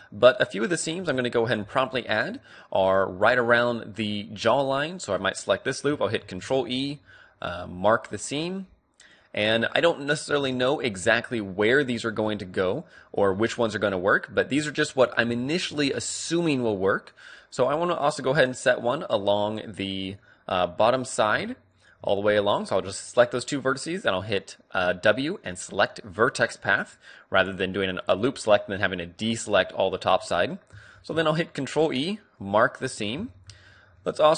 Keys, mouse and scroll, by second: 0.9 a, 2.0-3.1 right drag, 3.1-6.5 middle drag, 6.2 ctrl+e, 6.7 middle click, 9.5-13.8 middle drag, 10.3 a, 14.6 middle click, 15.1 right click, 15.3-16.4 middle drag, 16.4 right click, 16.6 a, 17.0 middle click, 17.2-18.8 right drag, 20.2-21.9 middle drag, 21.7-23.4 right drag, 22.4 w, 26.0-27.7 middle drag, 28.2-30.1 middle drag, 30.9 ctrl+e, 33.0 a.